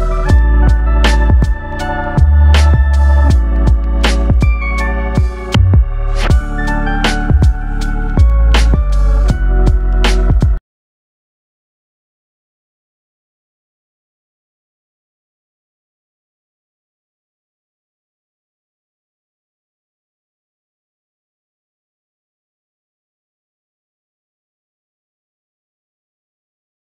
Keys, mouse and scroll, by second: 3.1 click, 5.5 click, 6.4-6.8 scroll down 2, 6.8 middle click, 7.5-8.2 scroll up 4, 8.5 click, 9.6 click.